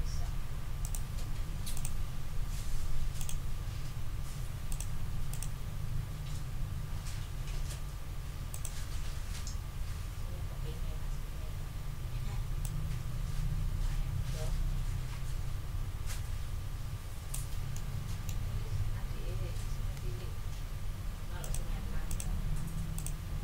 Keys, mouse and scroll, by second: 0.8 right click, 1.7 click, 3.2 click, 4.7 click, 5.3 click, 8.5 click, 11.6 ctrl+scroll up 2, 17.4 ctrl+click, 17.7 ctrl+middle click, 17.8 ctrl+click, 17.9 ctrl+middle click, 17.9 ctrl+scroll up 2, 20.0 ctrl+z, 21.4 click, 22.1 click, 22.9 click.